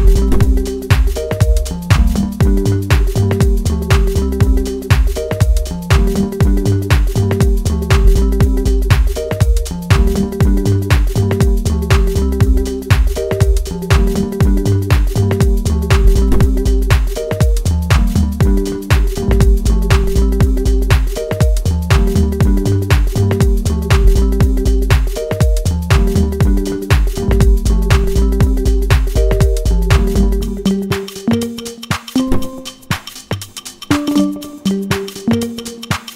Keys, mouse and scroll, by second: 0.5 right click, 2.8 click, 6.8-9.1 middle drag, 9.1-15.8 drag, 15.8 right click, 19.4 click, 22.2 Return, 24.4 click, 26.7 click, 27.2 Return, 28.5 click, 30.9 click, 32.5 Return, 34.9 click.